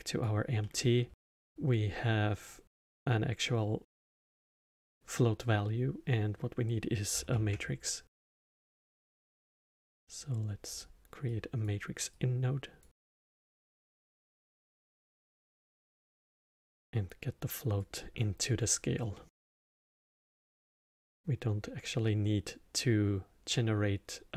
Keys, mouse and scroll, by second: 0.6-2.7 middle drag, 2.7 drag, 7.3 shift+a, 11.2 click, 12.1 click, 13.2 click, 14.7 click, 16.6 click, 19.1-22.3 middle drag.